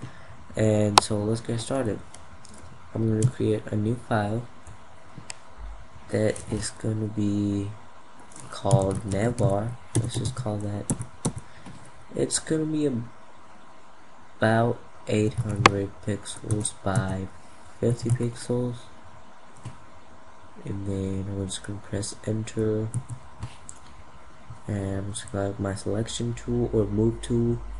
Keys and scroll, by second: 2.7 ctrl+n.